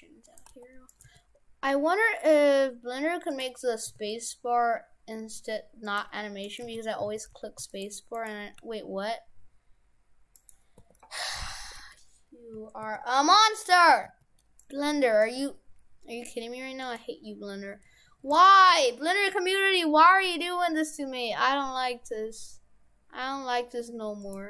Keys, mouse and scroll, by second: 0.5 g, 1.0 g, 3.9 s, 6.4 right click, 6.7 shift+f, 8.2 right click, 8.6 g, 10.8 r, 14.0 s, 15.2 s, 17.7 s, 18.8 s.